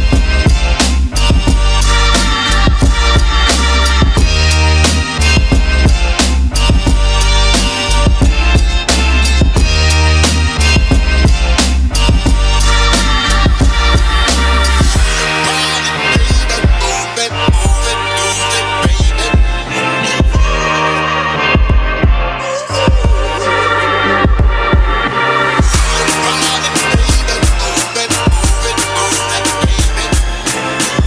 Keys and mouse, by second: 0.1 click, 3.9 click, 4.2 click, 5.1 click, 6.5 click, 7.5 click, 8.2-11.6 shift+right drag, 14.3 middle click, 14.7 middle click, 14.7 middle click, 15.3 right click, 16.9 shift+a, 20.4 middle click, 20.9 click, 21.6 ctrl+middle click, 22.0 shift+a, 24.8 click, 25.2 click, 25.7 shift+a, 28.5 click.